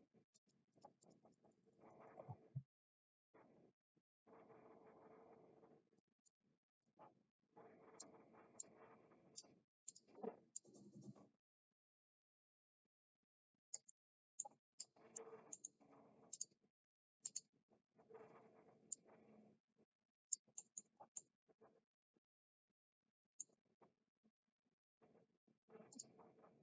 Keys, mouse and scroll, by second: 0.3 click, 0.7 click, 1.0 click, 1.2 click, 1.4 click, 2.0 click, 5.9 click, 6.8 click, 7.9 click, 8.6 click, 9.7 click, 10.5-13.7 drag, 13.8 middle click, 14.7 click, 15.5 middle click, 16.2 click, 17.1 click, 18.8-20.3 drag, 20.6 middle click, 21.2-23.3 middle drag, 25.9 click.